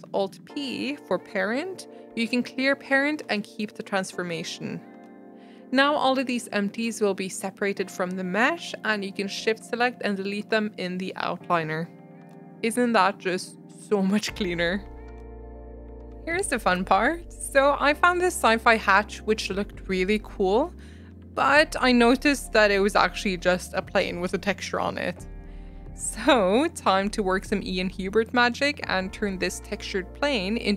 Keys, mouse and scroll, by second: 0.0 alt+p, 6.6 click, 6.9-7.2 scroll up 3, 7.6 shift+click, 7.9-10.2 right drag, 10.2 click, 10.6-11.2 scroll down 2, 11.2 shift+click, 11.5 right click, 12.7 click, 13.4 g, 15.9 r, 18.4 click, 19.1 scroll up 2, 19.3 shift+middle drag, 19.6-20.7 middle drag, 21.1-21.7 scroll down 5, 21.7 scroll up 1, 22.1 a, 22.8 r, 23.4 r, 26.1 click.